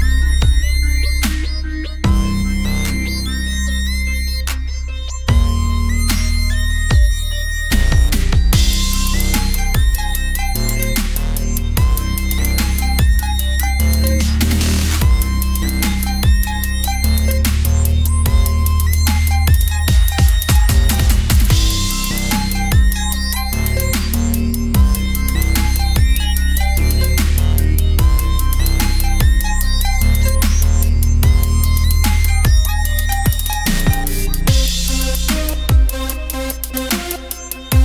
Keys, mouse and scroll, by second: 0.4 click, 0.7 f, 1.0 middle click, 1.7 ctrl+z, 1.9-3.0 middle drag, 3.0 click, 3.7 f, 4.4 click, 4.8 middle click, 5.3 click, 5.7-7.5 typing, 6.9-7.9 drag, 7.9 middle click, 8.2 click, 8.9 d, 9.0 f, 9.3 f, 9.6-11.4 drag, 11.6 click, 12.7 middle click, 13.3 middle click, 14.0 click, 14.3 f, 14.6 s, 15.7 middle click, 15.9 KP_1, 16.8 click, 17.7 r, 18.5 Tab, 19.9 middle click, 20.8 Tab, 20.9 Tab, 21.0 middle click, 21.3 KP_1, 22.8 click, 23.3-24.3 middle drag, 24.3 KP_7, 25.0 click, 26.0 KP_1, 26.6 r, 27.8 middle click, 28.4 middle click, 29.4 middle click, 30.9 click, 31.7 middle click, 32.8 Tab, 33.1 click, 34.6 click, 36.1 middle click, 36.9-37.8 drag.